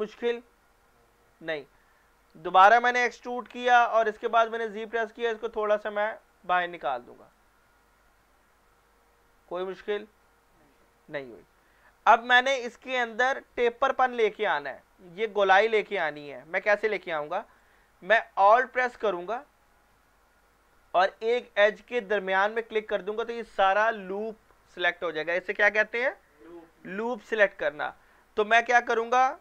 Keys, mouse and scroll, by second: 3.3 e, 4.6 z, 6.8 z, 7.2 click, 9.0 click, 9.6-11.6 middle drag, 11.6 scroll up 1, 17.6 click, 22.7 alt+click.